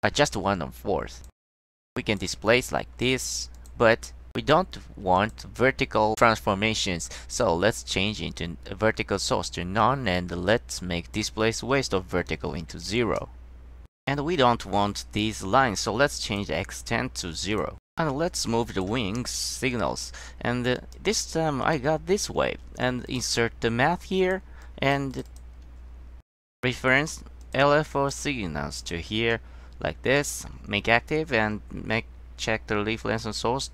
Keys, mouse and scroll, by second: 1.1 click, 2.0 click, 3.1 click, 3.7 click, 5.3 click, 6.2 click, 10.9-11.3 drag, 12.7 KP_0, 13.2 Return, 17.6 click, 19.2 scroll down 1, 19.8 click, 20.9 click, 21.7 click, 23.2 click, 24.3 click, 24.8 drag, 25.2 click, 25.4 click, 26.5 click, 27.5 click, 28.0 click, 28.9 click, 29.4 click, 32.4-33.7 drag.